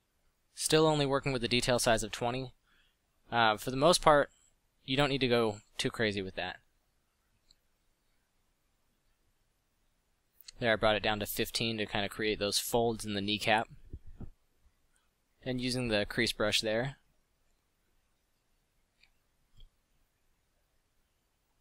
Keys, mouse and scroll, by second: 1.1 f, 2.9 f, 9.0 f, 13.8 f, 16.3 f, 18.5 f.